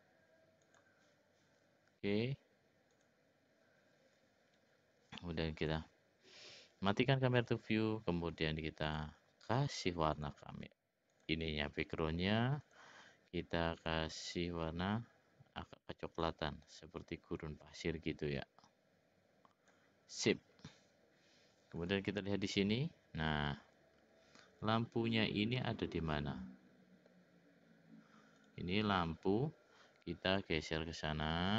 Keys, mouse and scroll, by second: 0.6 click, 3.0 click, 5.6 click, 8.9 click, 10.1 click, 11.1-14.2 drag, 22.0 click, 25.5-27.1 middle drag, 30.3-31.5 drag.